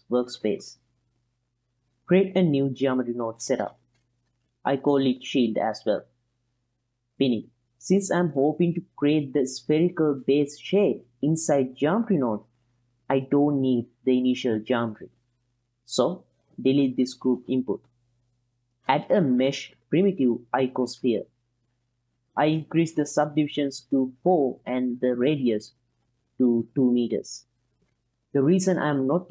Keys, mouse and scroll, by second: 3.1 click, 4.7-6.5 drag, 7.6 click, 8.1 middle click, 9.6 ctrl+middle click, 10.3 click, 11.4-12.4 drag, 17.6 x, 18.7 shift+a, 21.3 drag, 21.8 click, 22.2 middle click, 22.9 click, 24.3 click, 25.3-26.3 ctrl+middle drag, 26.7 click, 28.5 shift+a.